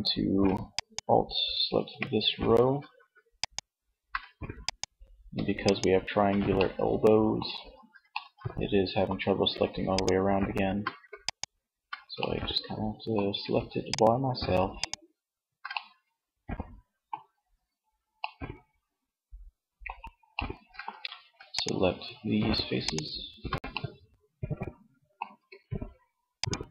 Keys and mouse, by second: 14.8 middle click, 20.8-22.6 middle drag, 25.7 shift+click.